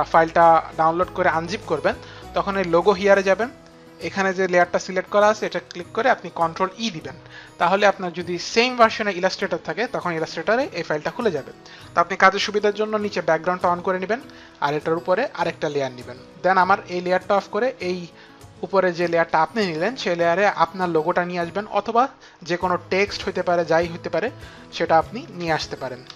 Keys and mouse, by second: 2.9 click, 4.2 click, 6.6 ctrl+e, 13.6 click, 15.3 click, 17.4 click, 22.5 click, 23.4 click, 25.1 shift+f, 25.4 shift+r.